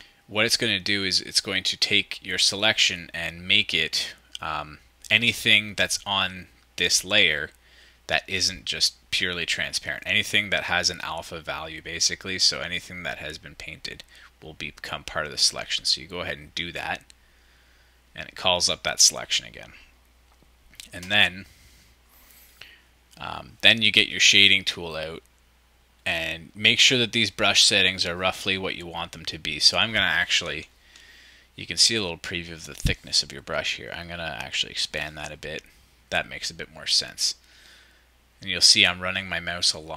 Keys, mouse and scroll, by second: 30.4 ctrl+shift+super+z, 30.4-32.4 shift+drag, 33.0-33.4 drag.